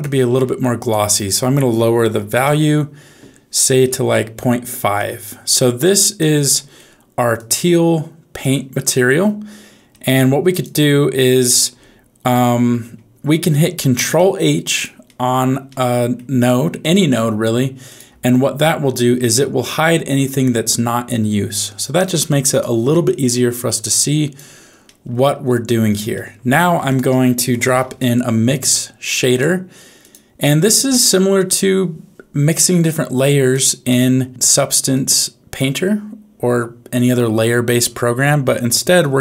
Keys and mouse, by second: 0.9-2.4 drag, 4.2 middle click, 4.9 click, 5.9 click, 6.5 middle click, 7.3-8.4 drag, 10.4 click, 11.6 h, 12.4 h, 14.1 click, 15.1 middle click, 15.7 middle click, 16.8 click, 17.8 click, 18.2 ctrl+h, 18.7 ctrl+h, 19.1 ctrl+h, 19.8 ctrl+h, 21.0-22.6 drag, 23.0 middle click, 23.8 click, 24.8 middle click, 26.1 middle click, 26.6 shift+a, 32.5 click, 32.8 click, 34.9-37.1 drag.